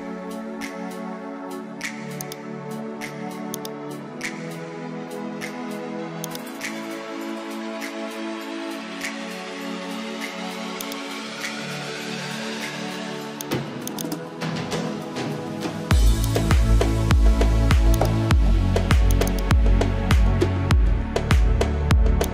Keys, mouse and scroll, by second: 2.2 ctrl+click, 6.3 click, 7.6 alt+scroll down 1, 7.9-8.2 alt+scroll up 1, 10.9-22.3 drag.